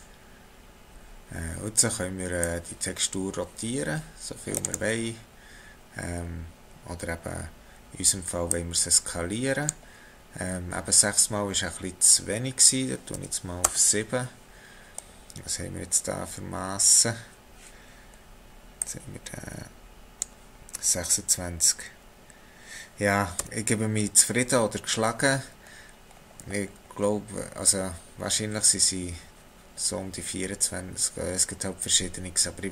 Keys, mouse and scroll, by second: 2.4 click, 8.5 click, 14.9-15.9 scroll up 5, 16.4-18.8 scroll up 6, 18.8 click, 23.4 x, 25.6-27.6 scroll down 7, 27.6-30.5 scroll down 1.